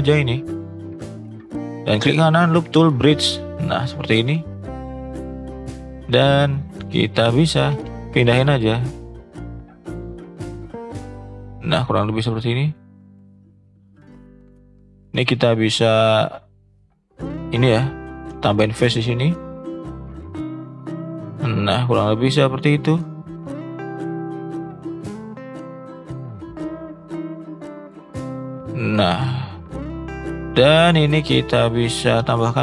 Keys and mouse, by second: 1.7-2.8 right drag, 3.3 click, 5.3 click, 7.7 g, 12.4 g, 15.0 click, 16.3 shift+click, 17.8 f, 18.7 click, 19.5 shift+click, 20.9 f, 21.2 click, 23.6 g, 26.1 click, 26.4 g, 28.3 shift+middle click, 29.1 shift+middle click, 30.0 shift+middle click, 30.5 click, 30.8 shift+click, 32.2 f.